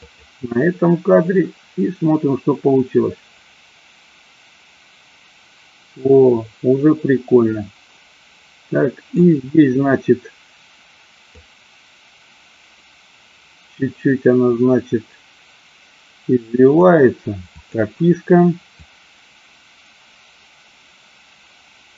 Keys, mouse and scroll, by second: 0.0 click, 1.4-9.4 drag, 11.3-17.0 drag, 17.5 click, 19.0-21.9 drag.